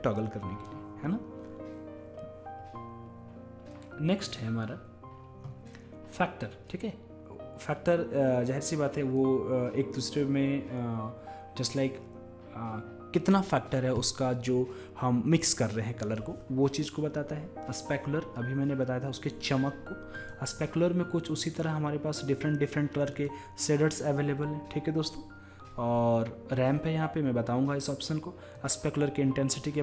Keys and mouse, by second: 4.3-8.6 drag, 9.3-11.1 drag, 20.2-22.1 drag, 28.6-29.8 drag.